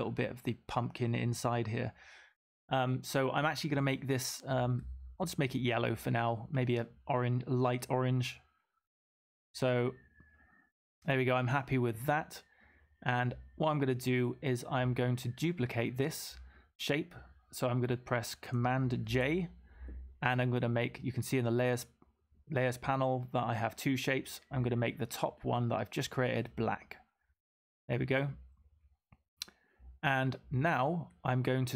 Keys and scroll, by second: 19.0 super+j.